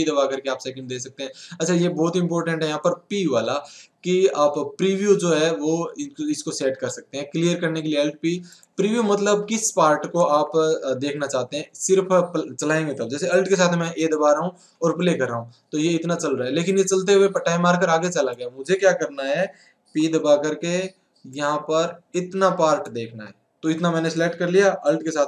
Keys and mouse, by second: 8.5-10.4 drag, 10.9-14.7 drag, 14.7 alt+a, 17.3-19.1 drag, 19.2 alt+a.